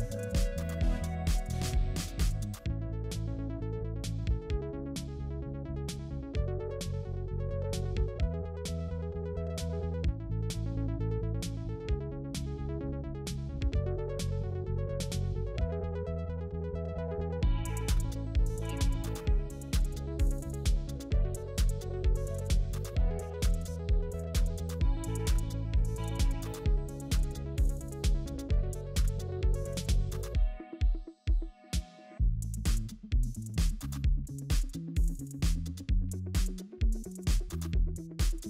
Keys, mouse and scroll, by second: 1.4 space, 4.4 alt+click, 6.6 alt+click, 9.8-10.1 scroll up 1, 14.6 alt+click, 15.5 ctrl+z, 16.5 alt+click, 20.1 alt+click, 20.4 space, 24.9 alt+click, 31.2 ctrl+z, 35.9 alt+click.